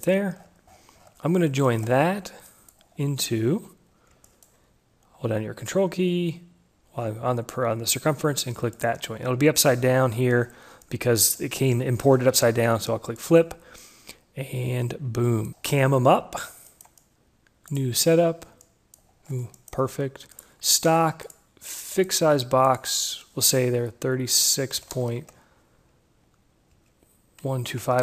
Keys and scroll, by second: 24.6 Right, 25.3 Left, 27.1 Delete, 27.7 2.